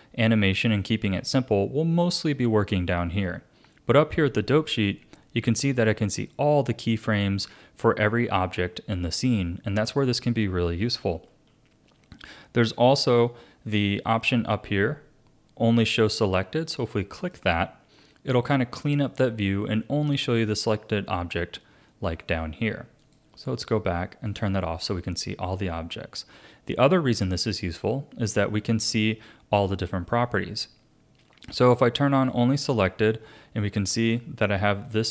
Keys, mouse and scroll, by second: 11.3 t, 17.2 click, 20.2 click, 23.0 click, 24.3 click, 32.1 click.